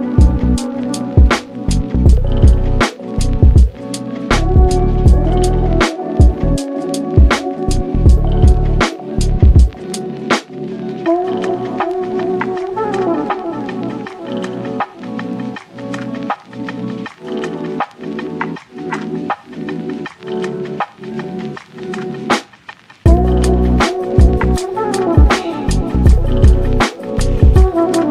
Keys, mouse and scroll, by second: 0.0 s, 1.0 g, 2.2 s, 3.2 g, 4.1 g, 5.2-5.5 scroll down 2, 5.5 drag, 5.8-6.5 middle drag, 6.5 ctrl+s, 7.1 shift+s, 7.7 shift+a, 9.1 s, 10.1 click, 10.4 shift+middle click, 10.7 ctrl+s, 12.3 z, 14.7 shift+a, 15.3 g, 16.1 s, 17.3 click, 17.9 click, 18.6 KP_0, 21.3 shift+d, 21.5 g, 23.5 g, 24.9 click, 25.2 scroll up 1, 25.4-26.1 middle drag, 26.1 ctrl+s, 26.3-27.1 scroll down 1, 27.1 click, 27.7-28.1 drag.